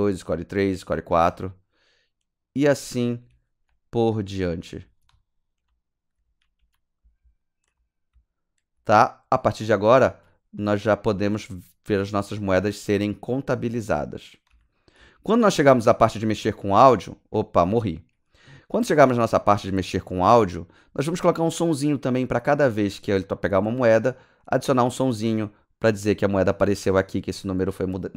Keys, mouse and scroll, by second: 1.3 d, 3.3-8.9 typing, 10.0 typing, 11.1 typing, 13.6-14.9 typing, 16.1-16.6 typing, 19.0 click.